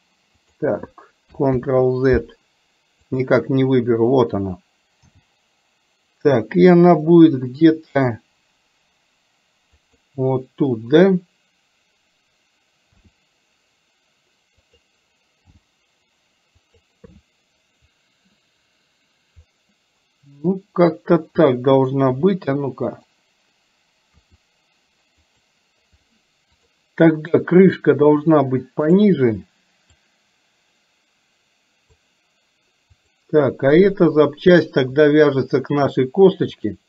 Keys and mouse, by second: 1.6 ctrl+z, 3.1 click, 5.1 g, 13.1 r, 15.6 g, 22.2 r, 24.2 r, 26.7 click, 30.0 click, 31.0-32.1 drag, 33.0 click, 35.5 shift+click, 36.6 click.